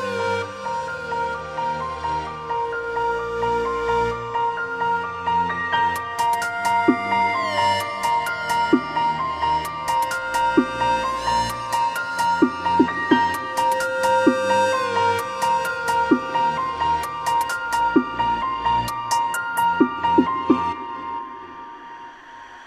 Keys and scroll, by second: 4.8 ctrl+KP_0, 6.0 ctrl+alt+shift+e.